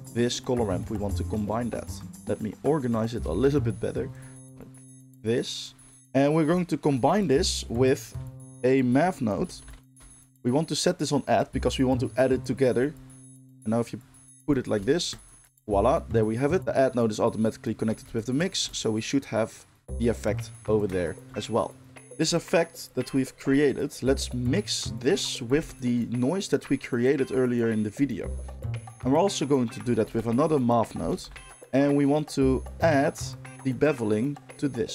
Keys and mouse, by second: 3.3 g, 4.2-13.4 middle drag, 4.3 r, 4.4 g, 7.7 shift+a, 13.4-15.2 drag, 15.2-16.6 ctrl+shift+middle drag, 16.6-18.4 drag, 18.4-25.6 ctrl+shift+middle drag, 25.6 ctrl+shift+click, 25.8-33.5 ctrl+shift+middle drag, 29.9 shift+a, 33.5-34.9 drag.